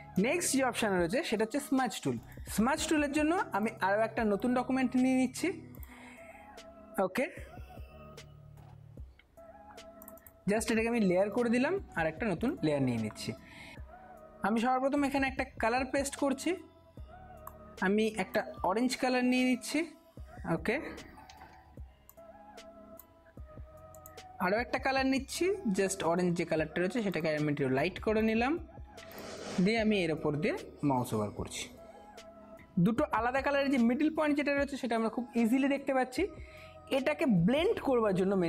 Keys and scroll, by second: 21.5 ], 21.6 ].